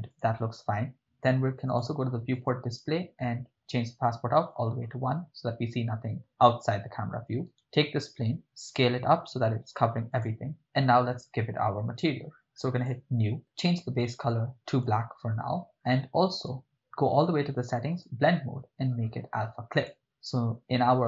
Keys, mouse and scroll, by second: 0.1 shift+click, 1.7 click, 2.3 click, 3.7-4.6 drag, 7.5 right click, 8.6 s, 10.1 click, 12.8 click, 13.6 click, 15.7 click, 18.0-20.0 drag.